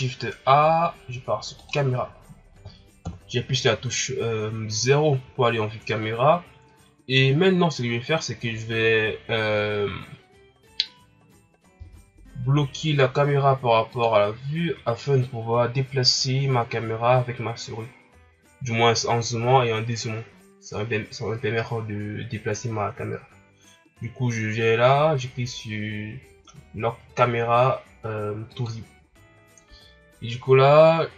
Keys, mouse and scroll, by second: 1.6 shift+a, 3.0 KP_0, 11.7 n, 28.4-30.5 drag, 30.5-31.1 scroll down 82.